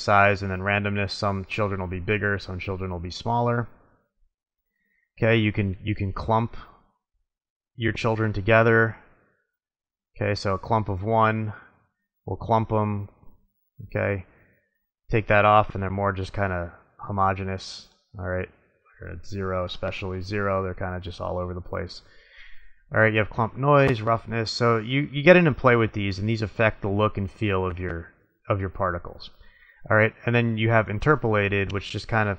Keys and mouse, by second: 3.3-6.4 middle drag, 6.4 click, 10.2-11.9 middle drag, 13.5 click, 15.2-16.0 middle drag, 17.8 click, 20.7 drag, 20.8-23.0 middle drag, 30.1-31.9 middle drag.